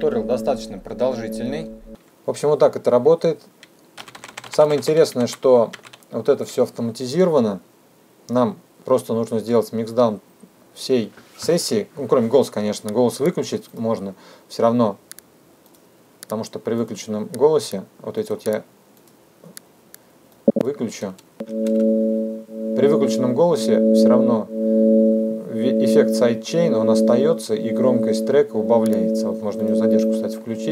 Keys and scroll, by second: 1.9 space, 22.1 space.